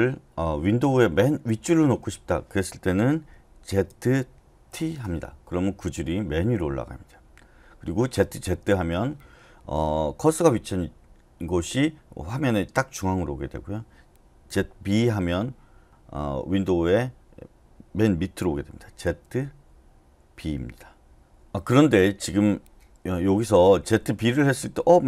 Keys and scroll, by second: 3.9-4.7 typing, 8.2 z, 8.4 z, 14.5-14.8 typing, 19.1 typing, 20.1-21.2 typing, 22.9-24.6 typing.